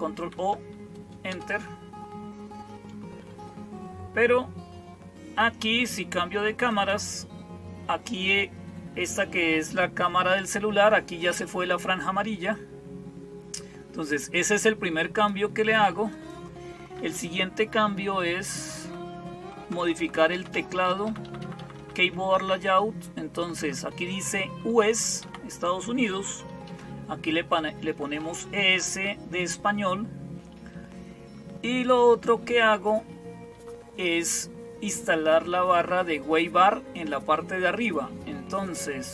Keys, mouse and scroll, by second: 0.0-39.1 typing, 0.0 ctrl+o, 1.1 Return, 6.5 click, 15.0 click, 16.0 click, 17.5-18.6 Down, 19.2 Down, 19.5 Down, 19.7 Down, 19.8 Down, 20.0 Down, 20.2 Down, 20.6 Down, 20.9 Up, 21.1 Up, 21.3 Up, 21.4 Up, 21.6 Up, 22.2 Right, 22.8-23.4 Right, 24.7 Right, 25.1 Left, 26.3 Delete, 27.2 Down, 27.7-28.1 Down, 28.3 Down, 30.6-32.1 Up, 38.5 Down.